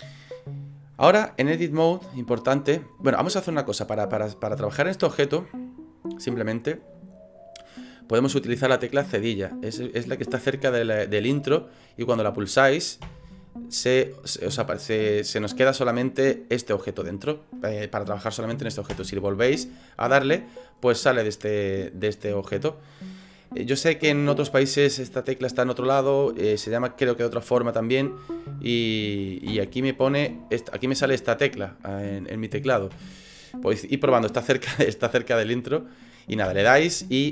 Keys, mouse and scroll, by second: 1.8 middle click, 2.9-3.4 scroll down 8, 3.7 middle click, 5.3 scroll down 1, 6.2 click, 13.0 /, 13.9 middle click, 15.8 scroll down 3, 16.2 middle click, 18.9 KP_Divide, 19.6 middle click, 22.2 middle click, 23.0 middle click, 26.6 middle click, 29.5 KP_Divide, 30.3 /, 31.0 /, 32.9 /, 35.8 scroll up 2, 36.4 KP_Divide, 37.0 middle click.